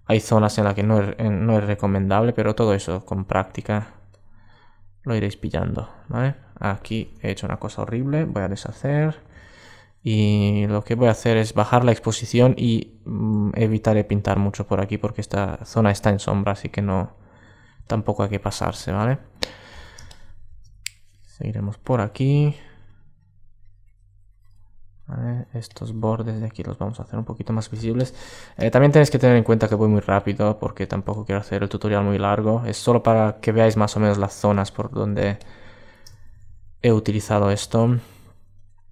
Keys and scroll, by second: 7.8 alt+super+z, 8.6 alt+super+z, 10.1 alt+super+z, 10.7 alt+super+z, 13.2 alt+super+z.